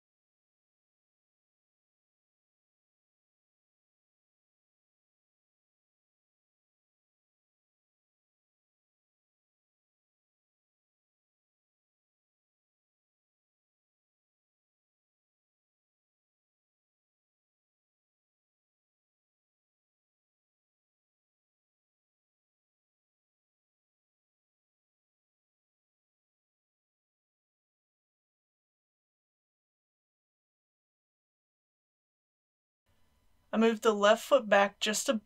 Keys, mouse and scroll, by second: 0.4 click, 0.9 g, 1.1 z, 2.0 click, 2.3 r, 2.8 click, 2.9 middle click, 3.5 g, 4.3 click, 4.5 g, 5.4 click, 5.5 KP_1, 6.1 r, 6.8 click, 7.6-8.5 scroll up 3, 8.1 middle click, 8.9 shift+r, 9.5 shift+r, 9.9 click, 10.1 scroll up 1, 10.4 click, 10.7 r, 11.0 z, 11.8 click, 12.2-18.7 typing, 12.9 click, 14.8 click, 15.9 click, 16.7 click, 17.3 click, 18.5 click, 19.1 click, 19.9-20.7 typing, 20.5 click, 21.0 click, 21.9 r, 22.5 click, 23.0 middle click, 23.9 click, 24.2-26.4 typing, 24.9 click, 26.1 click, 26.7-27.0 scroll down 1, 27.0 click, 27.2 middle click, 27.7 r, 27.8 z, 28.2 click, 28.7 r, 29.0 z, 29.6 click, 30.2 KP_1, 30.4 click, 30.5 scroll down 1, 32.5 middle click, 32.8 click, 34.1 KP_1, 34.5 g, 34.8 x.